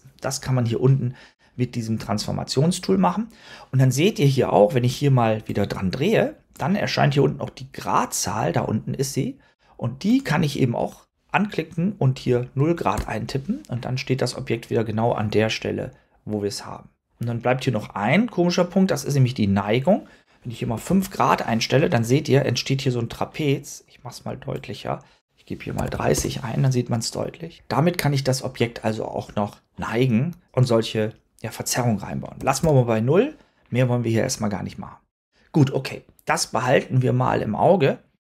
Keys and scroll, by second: 12.1 0, 12.8 Return, 20.5 5, 20.8 Return, 25.4-26.3 typing, 32.3 0, 32.5 Return.